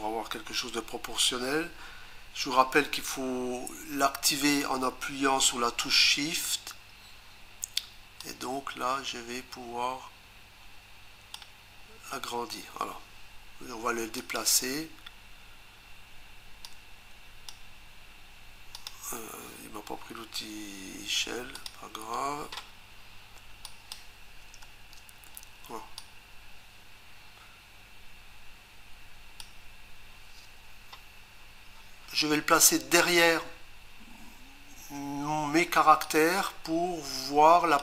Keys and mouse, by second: 8.2 shift+click, 14.2 click, 16.6 click, 18.8 click, 21.6 click, 23.7 click, 24.6 Return, 26.0 click, 36.1 click.